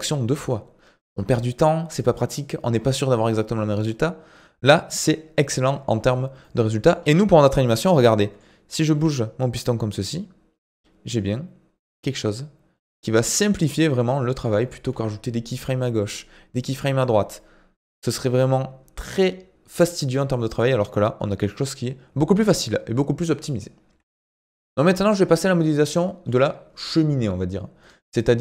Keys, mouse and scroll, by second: 4.9 Tab, 5.9 scroll down 2, 6.4-8.9 middle drag, 8.9 g, 23.9 ctrl+s, 25.1-25.9 scroll down 3, 25.9-28.4 middle drag.